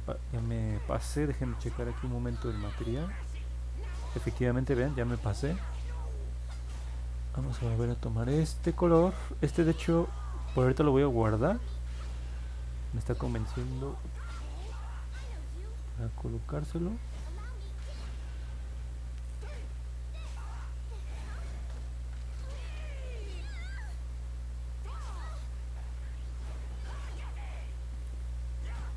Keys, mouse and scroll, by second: 18.7-27.7 drag.